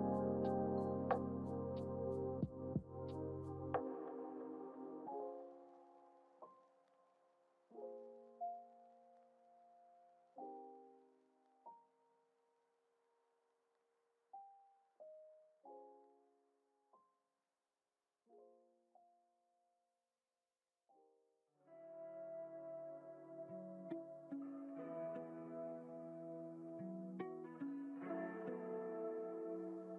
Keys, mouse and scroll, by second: 0.3 click, 2.4-5.2 drag, 6.3 click, 7.4 click, 8.2 click, 10.1 click, 13.1 shift+d, 19.1 z, 20.2 z, 24.6 click, 26.1 g, 27.8 ctrl+z, 28.4 ctrl+z, 28.7 ctrl+z, 29.8 click.